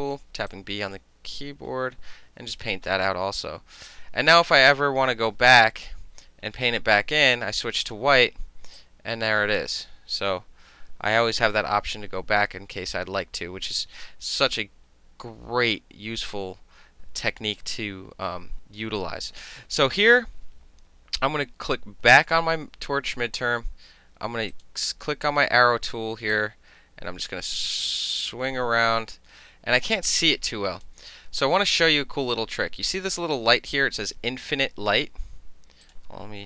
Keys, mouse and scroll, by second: 0.5-2.6 drag, 3.9 click, 5.3 ctrl+d, 7.9 click, 8.8 click, 11.6 ctrl+z, 22.2 click, 24.6 click, 26.4-30.9 drag, 35.9 click.